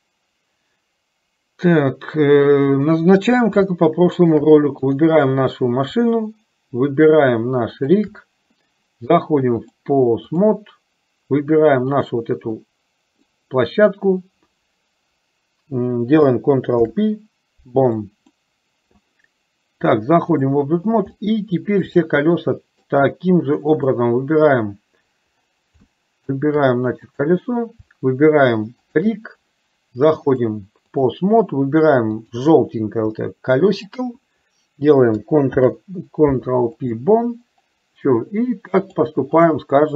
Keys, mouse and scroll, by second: 3.8 shift+middle click, 4.9 click, 7.9 shift+click, 9.9 click, 11.9 click, 12.9 middle click, 16.9 ctrl+p, 19.9 click, 21.4 middle click, 22.3 shift+middle click, 23.8 click, 26.2 shift+middle click, 27.3 click, 28.9 shift+click, 30.3-31.3 drag, 32.4 click, 33.4 middle click, 38.8 click.